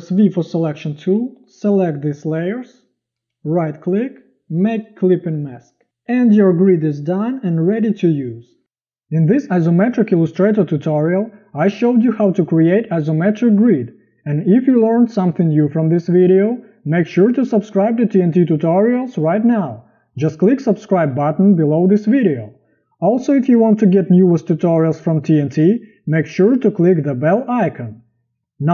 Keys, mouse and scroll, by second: 0.2 v, 7.2 z.